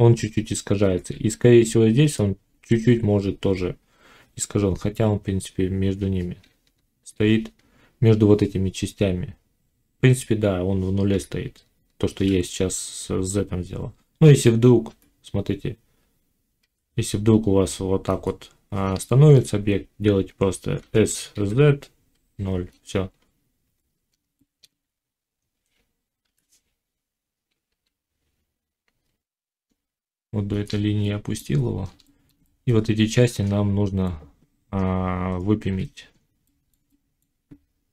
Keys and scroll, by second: 0.8 ctrl+z, 6.4 z, 11.1 z, 14.8 g, 16.5 g, 20.7 s, 26.2 g, 34.0 z.